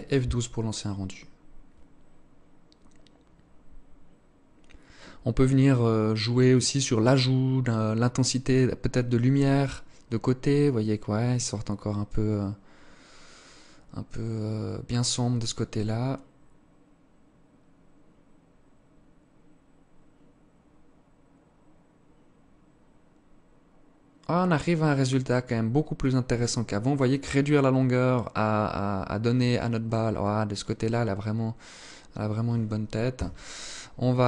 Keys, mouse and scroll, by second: 32.2 Escape, 32.6 scroll down 6, 33.4 right click.